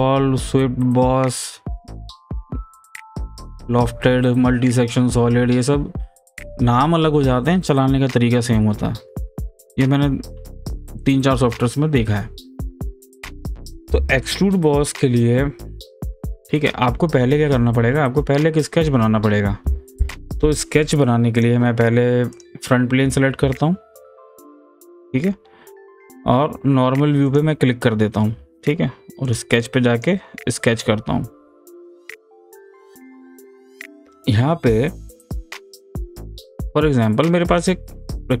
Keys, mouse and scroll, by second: 21.4 click, 24.1 f, 27.3 click, 34.4-36.2 scroll down 1, 36.3 click.